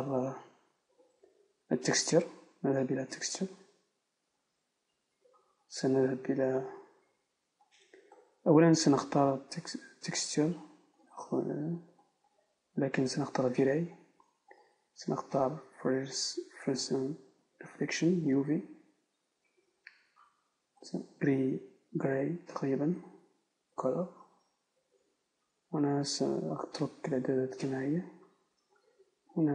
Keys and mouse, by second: 0.9 Tab, 11.1-13.6 right drag, 18.3-23.0 right drag.